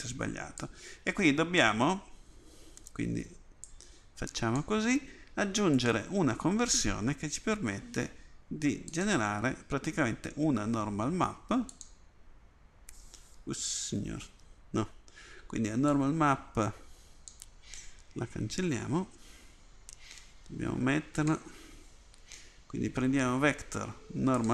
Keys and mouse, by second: 14.3 ctrl+z, 16.0-17.3 drag, 19.1 Delete.